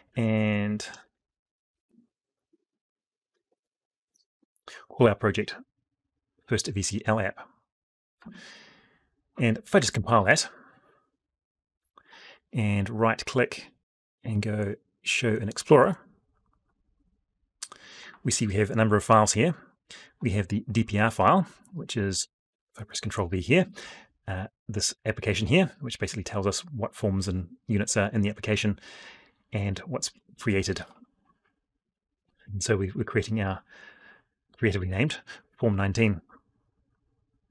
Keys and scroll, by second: 9.6 ctrl+F9, 22.2 ctrl+v.